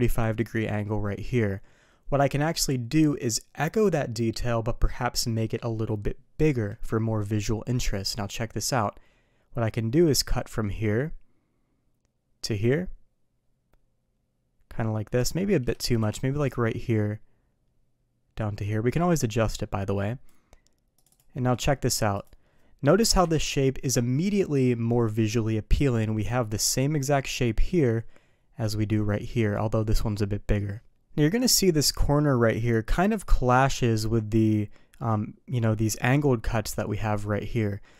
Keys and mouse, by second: 10.1-15.2 drag, 16.0 Escape, 16.5-20.3 drag, 21.3-22.2 middle drag, 23.2 KP_3.